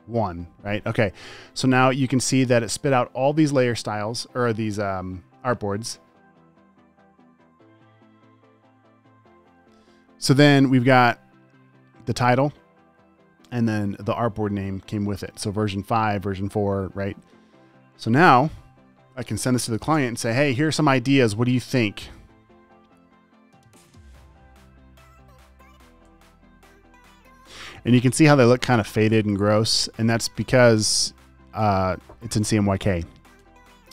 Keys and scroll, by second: 20.5 space, 24.4 Down, 26.6 Down.